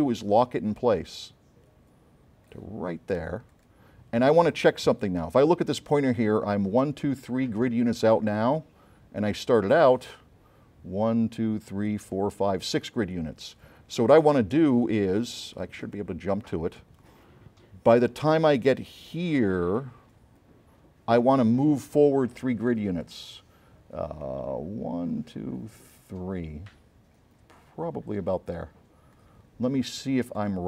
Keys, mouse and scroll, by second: 0.9-2.7 drag, 3.6 click, 9.3 click, 15.9 click, 19.2-21.4 drag, 23.1 click.